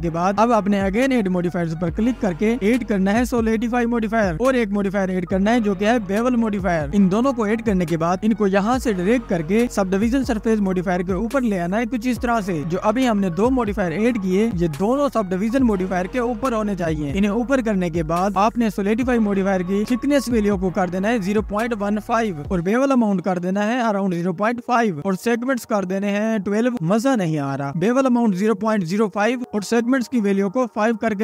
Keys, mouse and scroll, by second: 6.6-7.3 drag, 7.3-8.2 scroll down 2, 8.2-8.8 scroll up 2, 9.3-11.5 drag, 12.4 scroll down 2, 13.0 scroll down 8, 14.7-17.7 drag, 23.0-30.0 drag, 30.7 click.